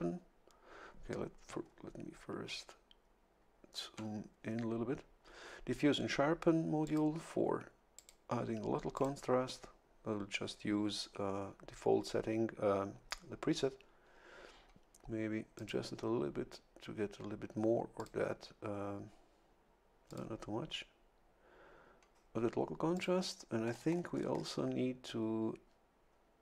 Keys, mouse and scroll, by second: 1.6 ctrl+scroll up 2, 2.2 ctrl+scroll up 2, 3.0 ctrl+scroll up 2, 6.8 click, 7.9 click, 8.9 click, 15.5 click, 18.0 click, 20.1 click, 22.9 click, 23.7-24.6 scroll up 3.